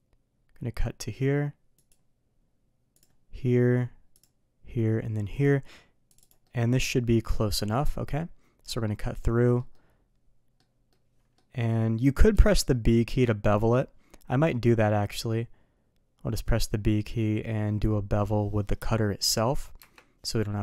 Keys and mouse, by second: 6.4-20.1 middle drag, 20.3-20.6 middle drag.